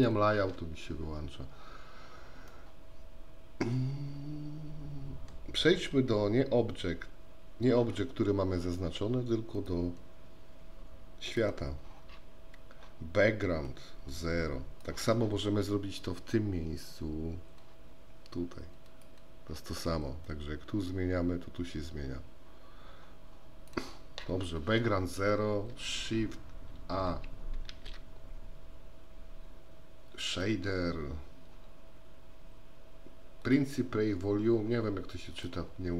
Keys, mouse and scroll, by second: 0.5 n, 2.6-5.3 middle drag, 9.6-11.5 drag, 13.8-14.9 drag, 18.9 click, 20.3-23.8 drag, 27.7 shift+a.